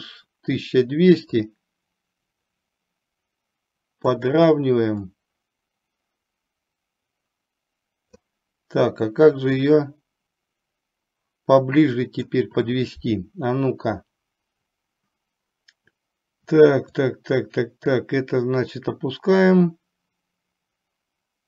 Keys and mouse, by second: 1.7-4.2 drag, 5.3-8.4 drag, 9.7-12.4 drag, 17.2-21.4 drag.